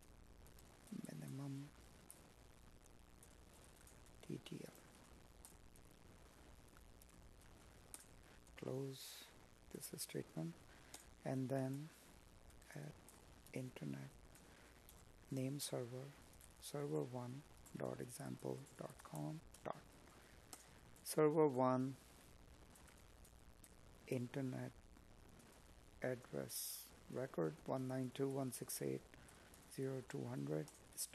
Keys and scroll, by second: 0.3 space, 12.8 space, 19.3 Tab, 23.7 space, 28.7 space.